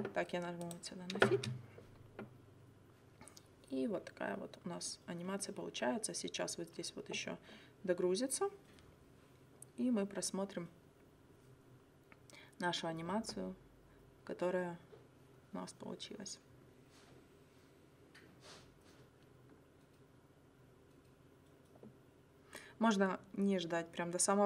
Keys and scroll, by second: 1.4 space.